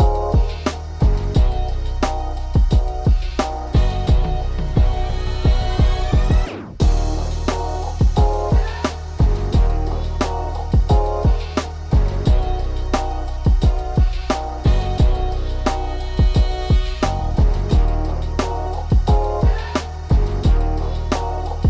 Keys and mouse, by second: 0.2 click, 0.4 right click, 1.1 f.